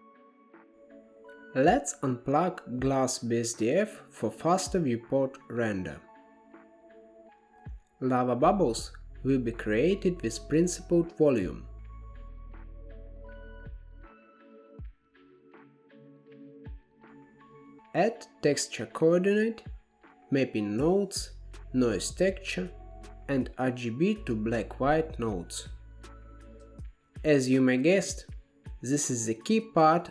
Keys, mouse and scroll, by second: 1.4 click, 2.4 g, 4.9-7.9 drag, 8.4 shift+a, 13.2-14.8 drag, 14.8-15.3 scroll down 3, 15.3-17.0 middle drag, 17.5-18.7 middle drag, 18.7 shift+a, 22.3 shift+a, 26.5-28.6 drag, 28.6-29.0 scroll up 1, 29.0-30.0 middle drag, 30.0 shift+a.